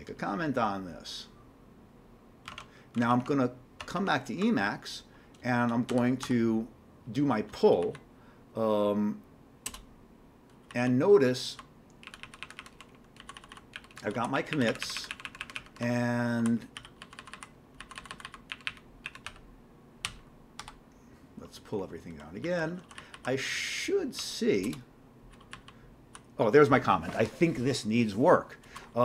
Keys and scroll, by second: 2.6 alt+Tab, 3.0 alt+Tab, 3.2 alt+Tab, 3.8 alt+Tab, 5.9-6.2 typing, 7.8 Down, 9.7 Return, 10.5 Down, 10.7 Down, 10.9-11.5 Down, 12.0 Up, 12.2 Up, 12.4 Up, 12.6 Up, 12.8 Up, 13.1-16.8 typing, 17.2 Down, 17.8 Down, 18.7 Up, 19.3-20.6 typing, 22.4-23.1 typing, 24.2-25.1 typing, 25.5 Down, 26.0 Down.